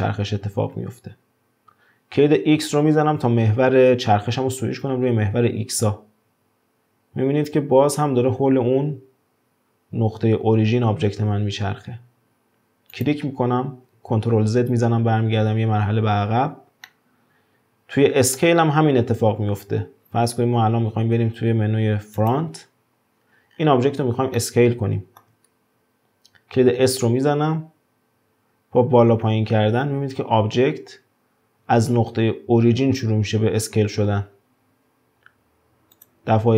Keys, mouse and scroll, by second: 14.6 ctrl+z, 16.9-19.9 middle drag, 23.2-23.5 scroll down 1, 23.5-24.4 scroll up 2, 24.4-25.5 shift+middle drag, 25.5-26.2 scroll down 2, 26.2-26.8 scroll down 1, 26.8 s.